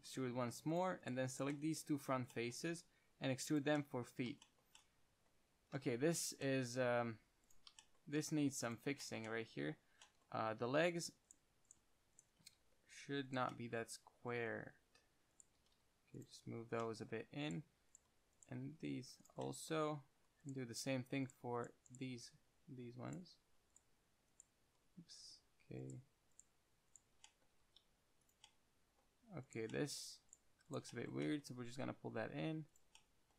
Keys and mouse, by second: 1.3 middle click, 1.8-3.0 middle drag, 3.0 e, 3.9-5.7 drag, 7.2 ctrl+Tab, 8.5 ctrl+Tab, 10.9 ctrl+r, 12.7 g, 15.9 g, 17.1-18.9 middle drag, 18.9 g, 19.7-21.3 middle drag, 27.8 g, 28.6-29.3 middle drag, 29.8-31.1 middle drag, 31.9 g, 33.1 drag.